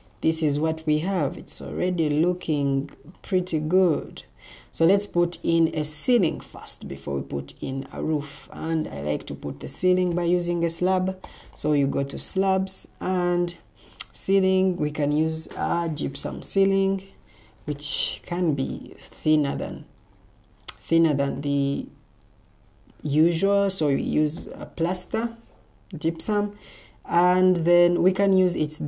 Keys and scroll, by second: 17.3-18.1 typing, 22.3 Escape, 24.3 p.